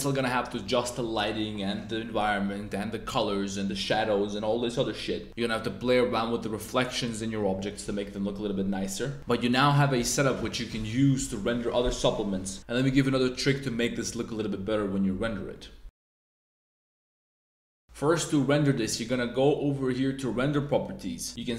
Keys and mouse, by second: 18.9 click.